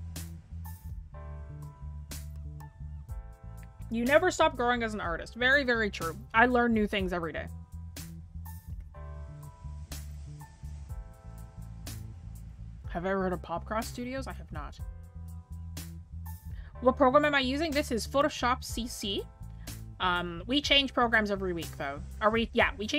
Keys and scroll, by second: 17.7-18.5 scroll down 1, 18.5 scroll up 1, 20.5-20.8 scroll.